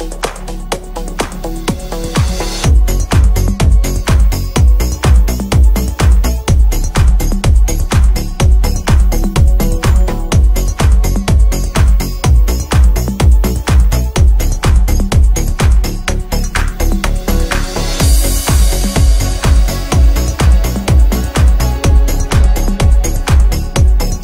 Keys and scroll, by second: 4.3 g.